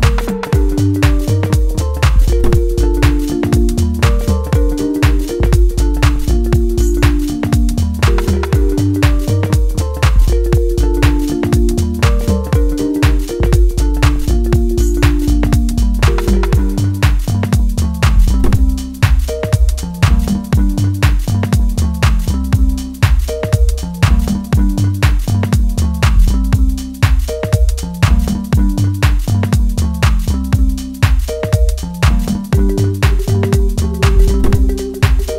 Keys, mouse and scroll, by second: 2.4 middle click, 3.3 scroll up 1, 3.7 shift+middle click, 3.8 shift+scroll up 1, 4.3-4.7 scroll up 1, 4.7-9.2 middle drag, 9.2 click, 10.9 scroll down 1, 11.2 middle click, 12.3 click, 13.0 shift+middle click, 13.6 scroll up 1, 13.9-24.2 middle drag, 24.2-33.4 drag, 33.4-35.3 middle drag.